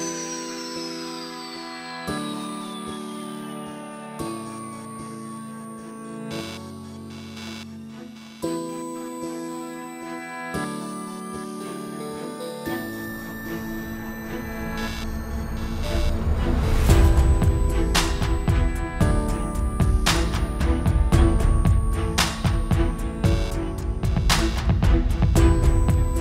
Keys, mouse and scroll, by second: 0.1 click, 1.1 click, 1.1 r, 2.5 alt+a, 2.6 shift+middle click, 2.6 scroll down 4, 2.7-3.3 scroll up 3, 2.8 middle click, 3.3-3.8 scroll down 1, 3.8 alt+h, 4.1 scroll up 1, 4.9 /, 5.2 scroll up 5, 5.3 middle click, 5.7 alt+a, 5.8-6.8 scroll down 6, 6.1 /, 6.6 click, 6.8 x, 7.1-7.6 scroll up 4, 7.5 middle click, 7.8 scroll down 1, 8.1 click, 8.3 scroll down 2, 8.5 scroll up 1, 9.4 click, 9.4 scroll up 1, 10.7 ctrl+z, 11.0 click, 11.7 h, 12.1 scroll down 3, 12.2 shift+middle click, 12.3-12.8 scroll up 2, 12.5 middle click, 13.7 alt+h, 14.0 alt+a, 14.2 scroll down 2, 14.4 shift+middle click, 14.5-15.2 scroll up 6, 14.6 middle click, 14.9 middle click, 15.2 scroll down 4, 15.4 click, 15.6 scroll up 1, 15.7 scroll down 1, 15.9 middle click, 15.9 scroll down 1, 16.1-16.5 scroll up 2, 16.7 alt+f, 16.7 scroll up 1, 16.8 y, 17.9-18.4 scroll down 4, 18.9 alt+d, 20.6 scroll up 5, 20.7 middle click, 21.1 click, 22.4 click, 23.1 s, 23.8 s, 24.5 r, 26.1 click.